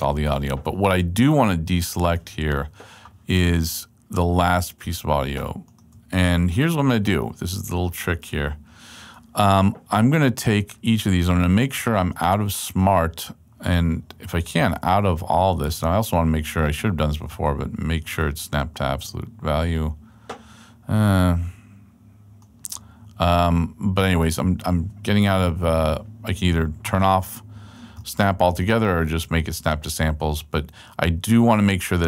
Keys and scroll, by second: 0.1 super+a, 1.4 super+Left, 8.1 super+Right.